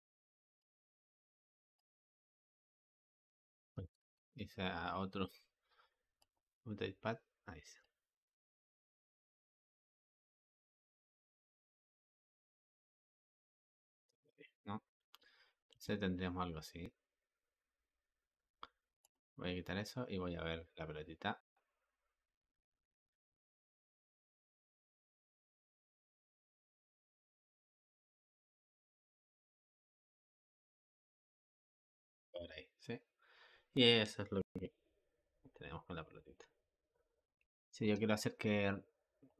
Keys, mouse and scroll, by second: 3.9 ctrl+z, 4.8 click, 6.2-10.9 drag, 15.7 space, 18.9 click, 37.7 Escape, 39.1-39.3 drag.